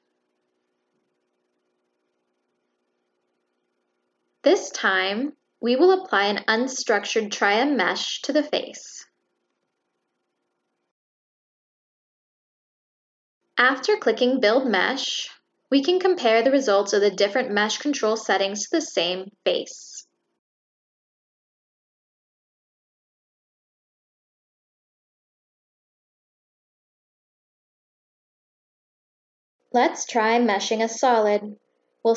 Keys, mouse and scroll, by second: 3.1 click, 3.7 click, 5.3 click, 5.9 click, 6.9 click, 7.2 click, 7.9 click, 8.2 click, 8.7 click, 9.3 click, 10.6 click, 12.0 click, 12.1-12.4 middle drag, 12.4 click.